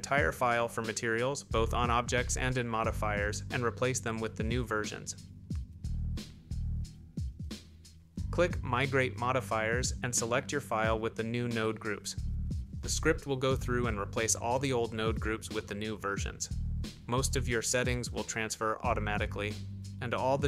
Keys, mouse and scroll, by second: 3.1 click, 11.0 click.